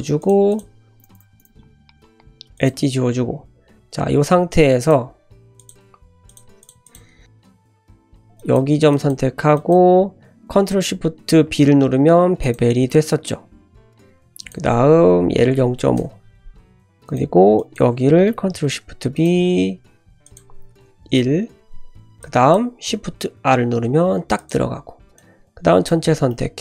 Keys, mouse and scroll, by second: 0.2 click, 0.5 shift+click, 0.9 shift+click, 1.1 shift+click, 1.3 shift+click, 1.9 x, 2.9 1, 4.8-6.3 drag, 6.6 click, 6.8 click, 7.5 click, 8.3 shift+click, 8.9 shift+click, 9.5 shift+click, 11.4 ctrl+shift+b, 14.3-16.4 drag, 17.0 click, 17.5 click, 18.5 ctrl+shift+b, 20.2-21.7 drag, 22.2 click, 23.3 shift+r, 24.3 click, 25.2 click, 26.1-26.6 scroll down 2, 26.3-26.6 middle drag.